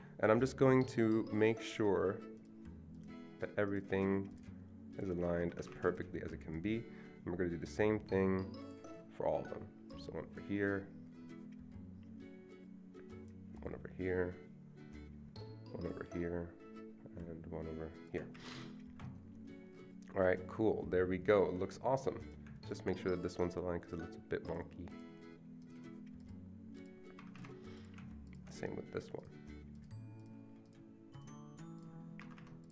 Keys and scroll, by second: 5.4 Escape, 5.6 Escape, 5.7 Escape, 18.4 Escape, 18.6 Escape, 27.2 Escape, 27.4 Escape, 32.2 Escape, 32.4 Escape.